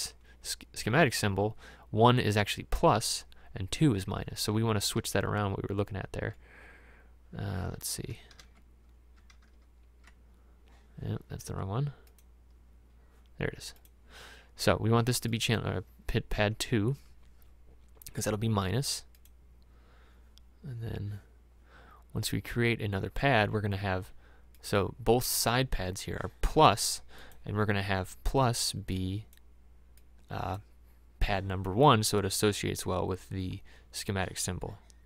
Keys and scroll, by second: 4.9 alt+Tab, 6.4 alt+Tab, 7.8 alt+Tab, 16.5 2.